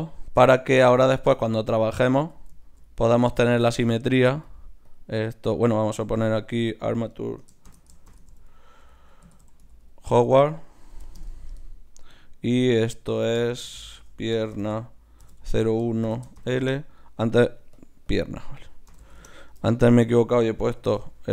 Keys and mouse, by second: 2.2 z, 3.4-5.4 middle drag, 4.4-10.9 drag, 4.4 right click, 12.1-16.2 drag, 17.7-21.3 drag.